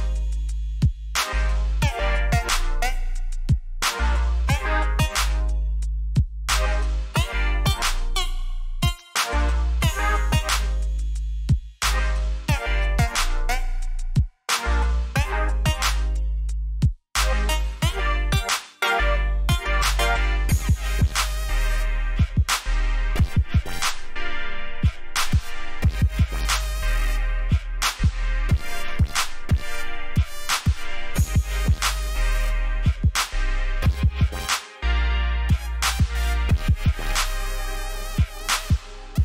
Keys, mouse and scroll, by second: 2.6 scroll down 1, 3.6 scroll up 1, 4.7 click, 9.0 alt+click, 9.9 click, 12.5-12.9 scroll down 3, 13.4 alt+scroll up 1, 14.1 scroll down 1, 14.3 click, 16.6 alt+click, 17.6 click, 19.0-19.4 scroll up 1, 19.6 alt+scroll up 1, 20.1 alt+scroll up 1, 20.7 alt+click, 21.6 click, 22.5-23.1 scroll down 2, 24.0 alt+scroll up 1, 25.0 v, 25.9 alt+click, 30.1 ctrl+z, 30.9 click, 31.7 alt+click, 34.2 click.